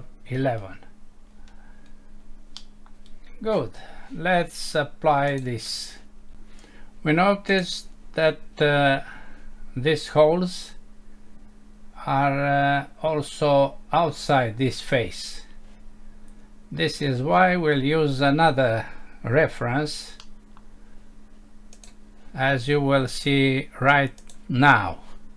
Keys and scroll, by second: 2.6 Home, 20.2 F6.